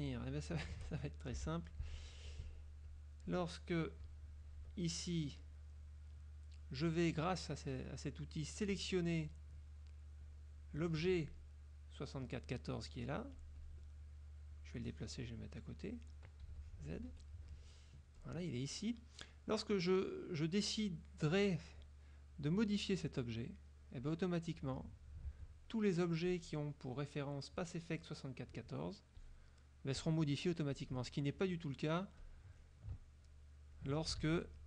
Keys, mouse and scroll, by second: 0.2 shift+click, 0.6 shift+click, 1.2 shift+click, 1.5 shift+Delete, 2.2 F2, 3.0 click, 4.2 KP_Subtract, 5.5 click, 6.5 click, 8.8 click, 10.4 click, 13.5 click, 14.6-16.1 drag, 16.6 z, 16.7 click, 17.2 F2, 18.3 click, 22.4-25.2 drag, 25.4 ctrl+z, 29.2 click, 30.9 click, 32.3 click, 33.4 ctrl+click, 34.3 ctrl+z.